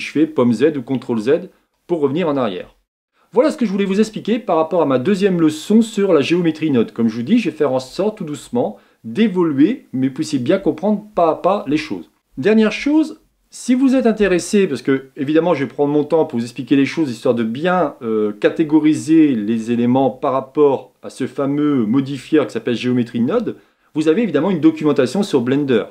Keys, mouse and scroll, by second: 0.3 z, 0.9 z, 1.4 z, 3.1-25.9 shift+middle drag.